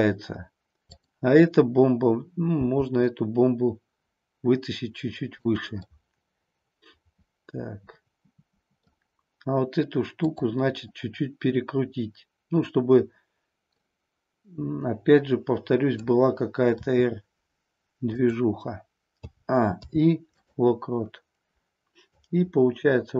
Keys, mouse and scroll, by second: 3.5 g, 5.5 click, 5.8-8.9 middle drag, 10.2-13.2 drag, 13.8-16.0 middle drag, 16.7 r, 18.3 click, 19.2 a, 19.7 i, 22.0-23.1 drag.